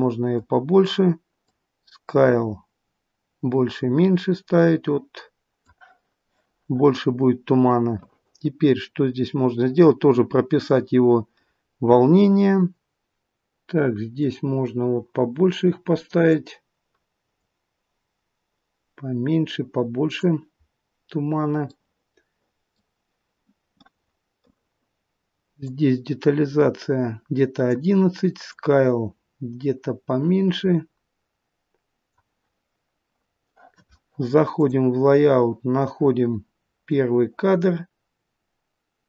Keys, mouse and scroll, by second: 34.8 click, 36.9 click.